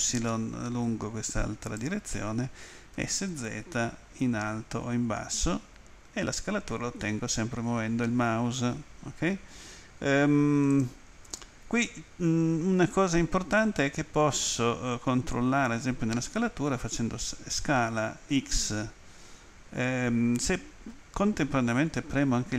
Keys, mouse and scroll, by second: 1.6 right click, 2.7-3.7 typing, 10.7 right click, 18.3 x.